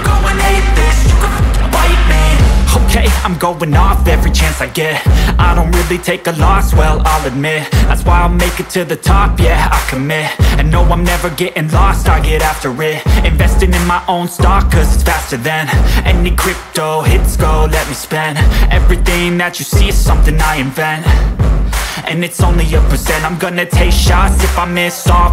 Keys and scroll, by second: 6.6 ctrl+shift+g, 7.4-8.6 typing, 11.1-14.8 typing, 18.2 ctrl+space.